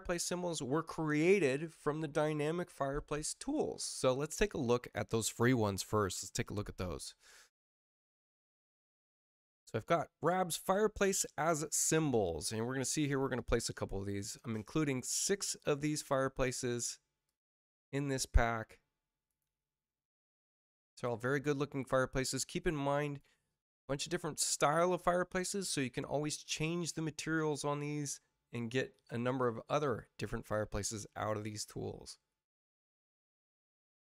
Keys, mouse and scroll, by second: 8.1 click, 9.0 click, 11.5 click, 13.3 click, 15.4 click, 17.2 click, 19.2 click, 20.9 click, 23.0 click, 24.7 click, 25.6 click, 29.2 click, 31.2 click, 32.5 click.